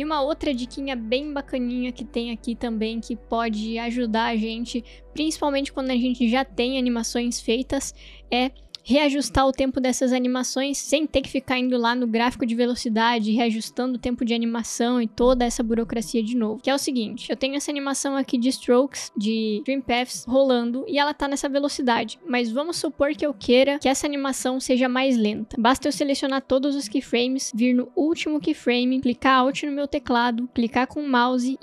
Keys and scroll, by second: 1.4 space, 23.3 space.